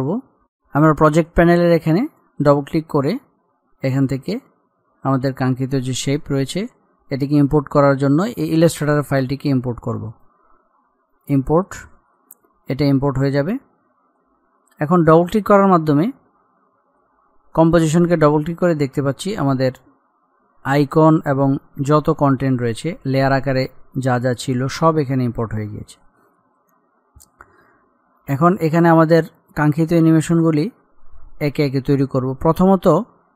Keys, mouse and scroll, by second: 2.3 click, 9.5 click, 15.0 click, 18.6-19.9 scroll down 1, 25.4-26.4 scroll up 1, 28.4 click, 29.5-30.1 scroll down 1.